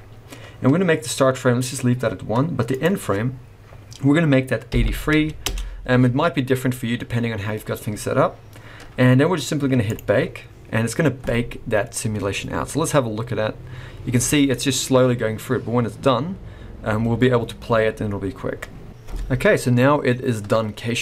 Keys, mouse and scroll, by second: 2.7 click, 9.9 click.